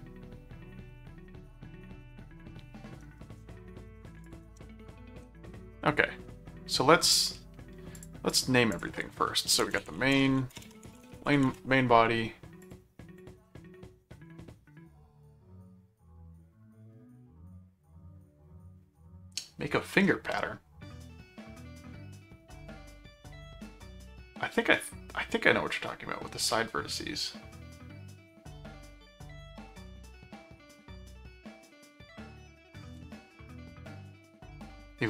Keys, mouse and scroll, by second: 4.2 ctrl+click, 4.4 ctrl+Tab, 7.9 click, 9.4-11.8 typing, 12.6 click.